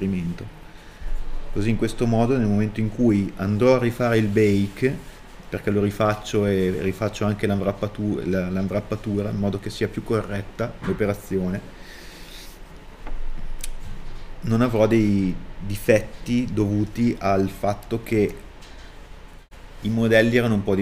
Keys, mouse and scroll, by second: 0.7 middle click, 1.7 middle click, 10.4 scroll up 1, 10.8 middle click, 13.5 scroll down 1, 14.0 middle click, 15.1 middle click.